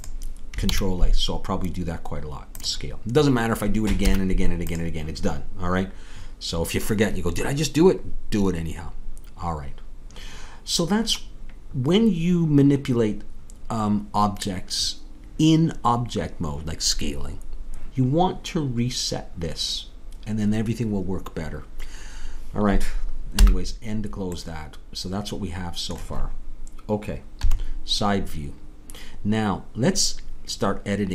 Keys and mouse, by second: 0.6 ctrl+a, 23.4 n, 27.4 KP_3.